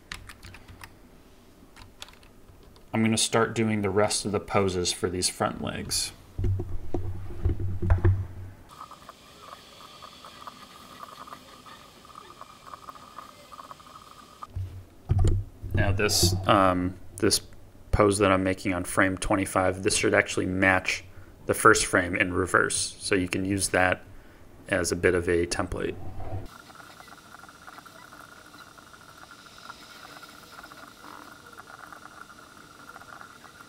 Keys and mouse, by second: 0.0 KP_1, 0.3 KP_3, 0.6 KP_9, 9.0-11.3 typing, 10.8 click, 11.7 click, 12.3-13.9 typing, 13.2 click, 13.5 click, 13.9 click, 14.1-26.6 drag, 26.6-27.7 typing, 26.7 click, 27.2 click, 27.9-29.2 drag, 29.2-33.1 typing, 29.3 drag, 29.5 click, 30.2 click, 30.4 click, 30.7 click, 31.1 ctrl+z, 31.2 ctrl+z, 32.4 click.